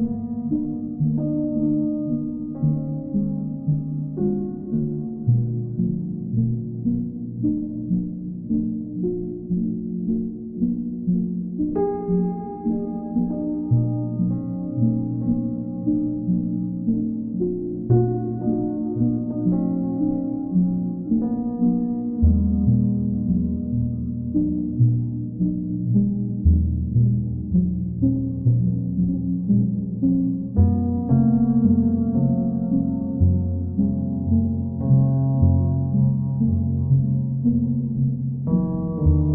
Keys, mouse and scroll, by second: 0.4 alt+click, 1.7 click, 2.1 shift+click, 2.7 click, 3.2 alt+click, 3.8 click, 4.2 alt+click, 6.2 alt+click, 8.4 ctrl+click, 9.2 ctrl+click, 9.7 w, 12.5 click, 14.2 ctrl+click, 15.4 ctrl+click, 16.1 ctrl+click, 16.7 ctrl+click, 19.7 click, 20.5 alt+click, 21.3 ctrl+click, 22.7 ctrl+click, 23.1 ctrl+click, 26.4 click, 27.1 ctrl+click, 28.0 ctrl+click, 28.2 ctrl+click, 29.7 ctrl+click, 30.8 ctrl+click, 31.3 ctrl+click, 33.3 click, 37.0 ctrl+click, 39.1 ctrl+click.